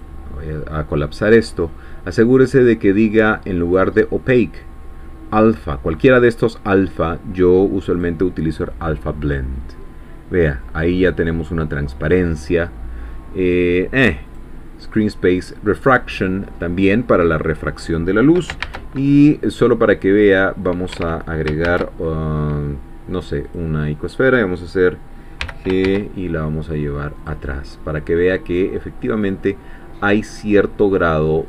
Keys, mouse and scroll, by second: 3.6 click, 7.9 click, 9.4-11.0 middle drag, 11.0 scroll down 2, 11.2-12.8 drag, 14.4 click, 15.1-16.7 middle drag, 17.1 scroll up 2, 18.6 shift+a, 20.9 Escape, 21.6 shift+a, 23.4 click, 25.4 g, 25.8 shift+z, 27.2-30.6 drag, 27.5-30.6 middle drag, 30.7-31.2 scroll up 4.